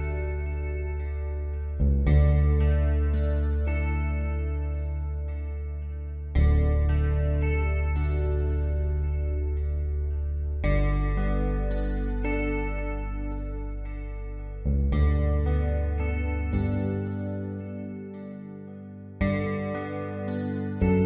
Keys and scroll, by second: 1.8-2.3 typing.